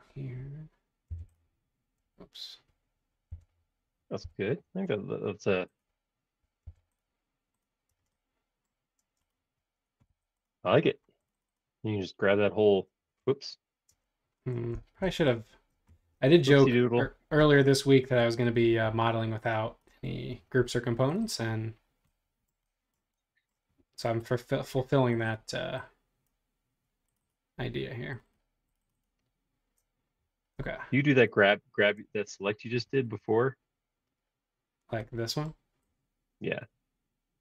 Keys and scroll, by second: 1.1 p, 2.0 Escape, 3.3 p, 4.2 l, 6.6 p, 7.9 space, 9.0 space, 10.1 Home.